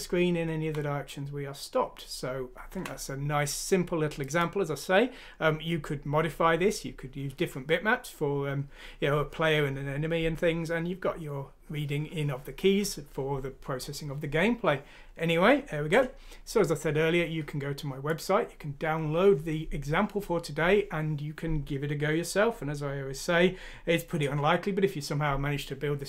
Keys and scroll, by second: 0.3 Right, 1.3 π, 1.5 Right, 1.5 space, 1.6-2.5 Down, 2.7 Down.